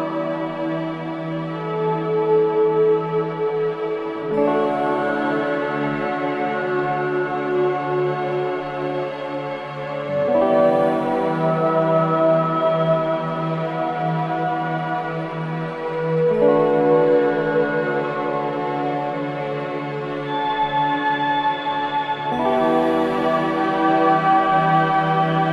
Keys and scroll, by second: 4.1 space, 16.0-16.9 typing, 22.1 ctrl+c, 22.3 ctrl+v, 25.2 BackSpace.